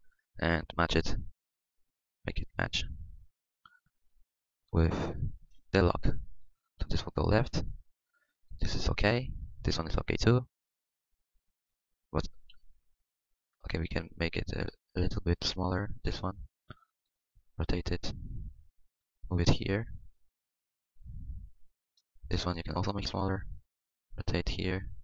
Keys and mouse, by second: 0.4 Tab, 0.6 Tab, 0.7 z, 12.5 KP_3, 16.0 middle click, 16.9 s, 17.3 r, 18.0 r, 18.4 s, 19.0-20.0 drag, 20.0 s, 23.5 r, 23.7 click, 24.7 s.